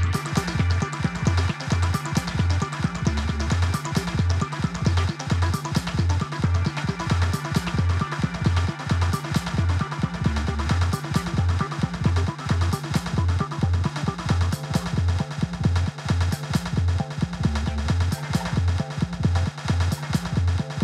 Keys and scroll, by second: 5.7 typing, 8.5 typing.